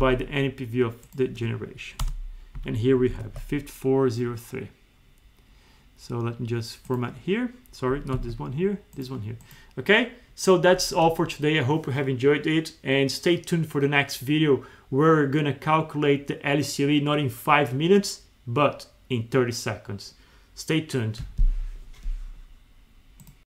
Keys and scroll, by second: 2.5 Up, 3.3 alt+2, 8.2 alt+2.